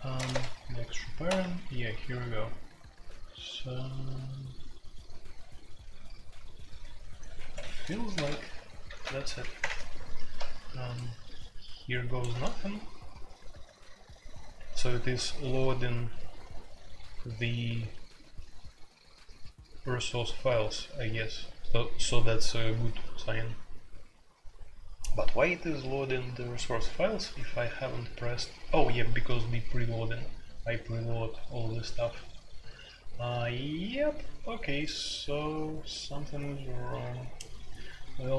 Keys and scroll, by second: 0.0-38.3 typing, 0.3 Tab, 1.2 Escape, 7.3 Escape, 7.5 F2, 8.1 ctrl+c, 8.2 ctrl+c, 8.9 alt+2, 9.2 alt+p, 9.6 Return.